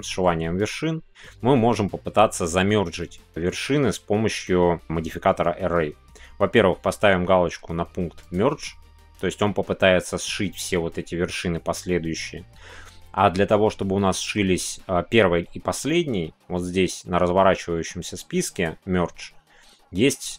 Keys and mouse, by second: 8.2-20.3 drag.